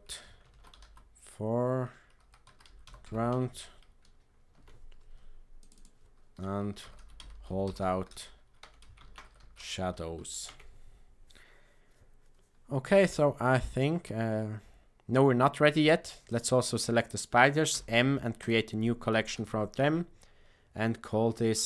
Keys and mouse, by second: 5.6 click, 6.6-12.4 shift+drag, 17.6 m.